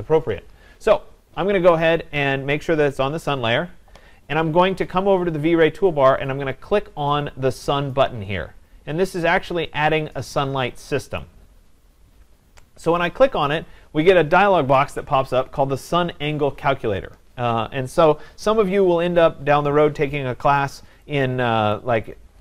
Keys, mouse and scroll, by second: 11.2 click, 13.5 click, 21.8 click.